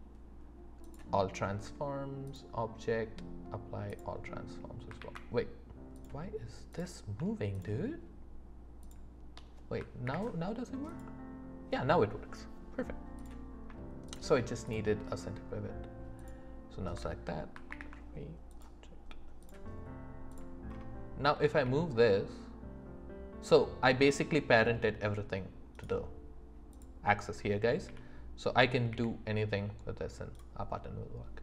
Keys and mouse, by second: 2.3-4.0 drag, 5.0 ctrl+z, 5.9 click, 6.7 click, 8.8 shift+click, 10.0 ctrl+p, 14.1 shift+click, 14.6 shift+click, 16.2 shift+click, 17.7 ctrl+p, 21.6 g, 25.7-26.8 drag, 27.8 g, 28.9 r, 30.3-31.4 drag.